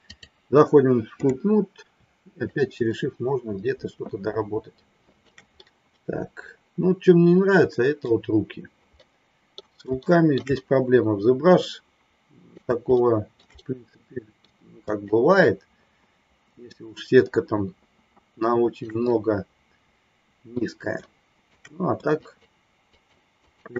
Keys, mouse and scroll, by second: 2.4-5.3 shift+drag, 5.5-8.1 middle drag, 8.9 middle click, 9.9 shift+middle click, 10.4-12.6 middle drag, 12.9 shift+middle click, 13.6 middle click, 14.9-18.9 shift+drag, 19.0-20.6 middle drag, 20.9 shift+middle click, 22.2 shift+click, 22.9 shift+click, 23.3 shift+click.